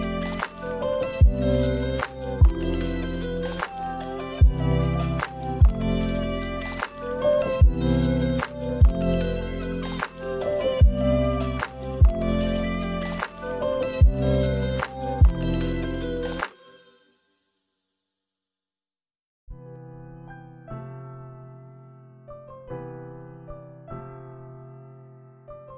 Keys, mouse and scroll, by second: 1.2 middle click, 1.8 middle click, 2.8 click, 4.2 click, 4.6 click, 5.4 click, 7.7 click, 7.7-9.6 scroll up 8, 8.6 click, 9.2 middle click, 9.8 shift+a, 12.2 shift+a, 14.6 click, 15.4 click, 15.7 click, 19.0 click, 19.3 click, 19.9-20.7 scroll up 3, 20.1 middle click, 20.8 click, 22.1 click, 23.1 click, 23.3 click, 24.6 click, 24.8 middle click.